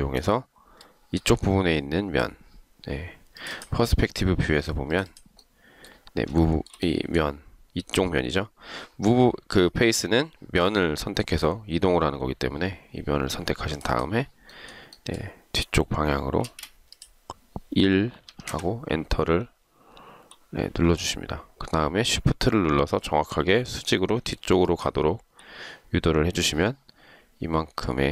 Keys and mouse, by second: 6.5 shift+right click, 16.6 space, 18.5 1, 18.7 Return, 24.5 shift+click.